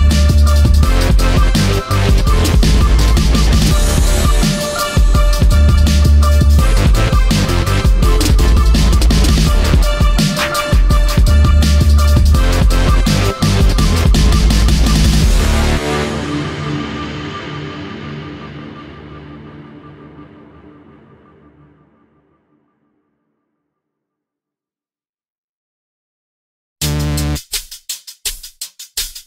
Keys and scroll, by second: 1.2 p, 11.0 space, 14.1 space, 16.3 space, 19.4 space, 22.5 space, 23.6 space.